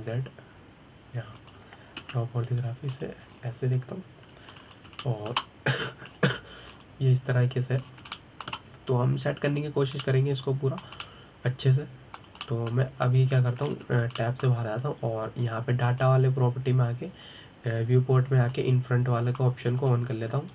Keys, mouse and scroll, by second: 0.1 click, 1.0 g, 3.7 KP_7, 4.6-5.0 scroll down 2, 5.0-6.3 scroll up 1, 6.3-6.7 scroll down 3, 6.7-7.8 shift+middle drag, 7.8-8.4 scroll up 3, 8.4-9.5 scroll down 2, 9.5-9.8 scroll up 1, 9.8-11.2 shift+middle drag, 11.2-11.7 scroll down 3, 11.7-15.4 middle drag, 15.4 Tab, 15.9-17.5 middle drag, 17.5 click, 20.1-20.5 drag.